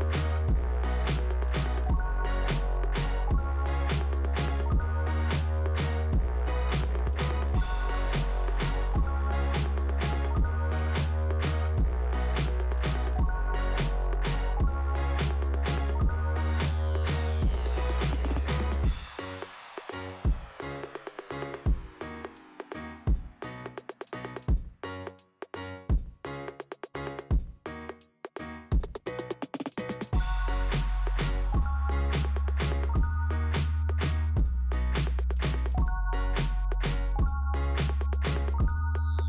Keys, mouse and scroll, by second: 0.5 click, 1.7 click, 2.7-3.4 scroll up 1, 5.0 click, 7.0 click, 7.7 right click, 13.0 click, 14.8 click, 15.4 click, 16.0 click, 20.9 click, 21.0 click, 23.8 scroll up 2, 25.3 click, 26.7 click, 27.7 click, 32.4 middle click, 35.0 click, 35.6 Delete, 38.9 middle click.